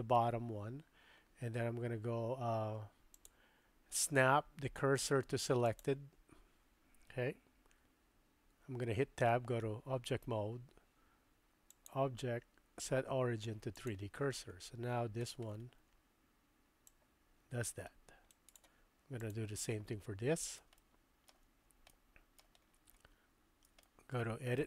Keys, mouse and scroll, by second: 3.2-5.9 drag, 8.5 Tab, 11.8-13.9 drag, 16.9-18.6 drag, 20.8-21.4 shift+drag, 21.9 middle click, 24.4 shift+middle click.